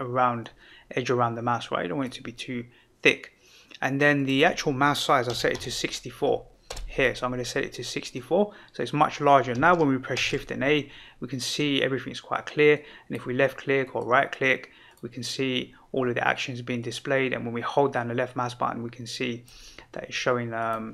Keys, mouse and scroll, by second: 0.4-2.1 drag, 4.1-7.2 drag, 10.1 shift+a, 12.7 click, 13.8-14.7 right drag, 14.8 click, 16.8-19.5 drag, 20.5 click.